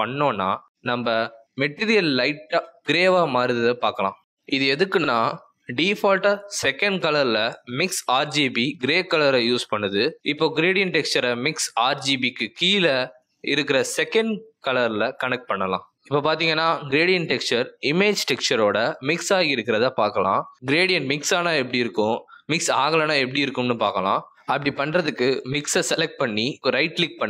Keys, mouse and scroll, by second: 16.1 click, 26.1 click, 26.5 right click.